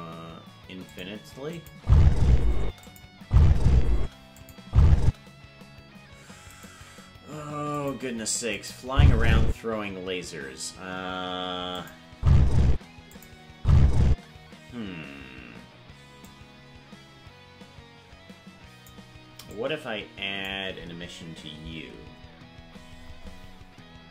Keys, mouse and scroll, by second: 1.5-3.0 drag, 1.7-5.1 typing, 4.4 click, 6.5 right click, 6.7 g, 8.6 click, 8.8 space, 11.8 click, 12.1 space, 13.2 click, 13.5 space, 16.3-18.9 drag, 19.6 click, 22.6-23.5 scroll down 17.